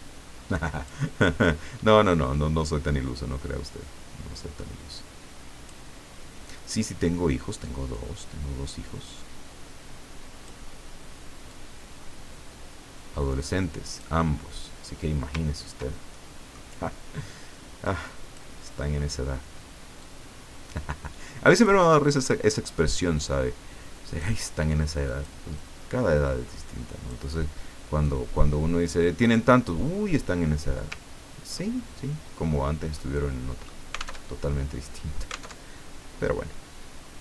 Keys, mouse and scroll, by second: 3.1-5.9 drag, 7.9-10.7 drag, 11.5-14.2 drag, 15.4 ctrl+scroll down 2, 16.1 ctrl+middle click, 18.1 click, 20.0-21.9 drag, 22.5-24.5 drag, 25.1 click, 25.5-27.3 drag, 28.0-29.4 drag, 31.1 ctrl+scroll up 2, 33.0 middle click, 34.2 alt+Tab, 35.5 alt+Tab.